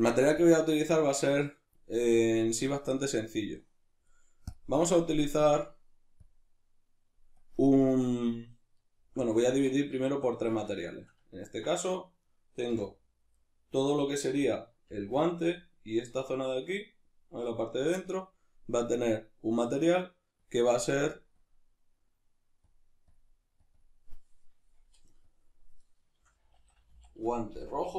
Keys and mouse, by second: 0.3-1.9 drag, 1.9-3.2 shift+middle drag, 3.2-4.5 drag, 7.4-9.1 drag, 9.1-12.2 middle drag, 9.5 Tab, 12.2 right click, 12.7 l, 13.4-18.8 middle drag, 14.9 l, 18.8-27.9 drag.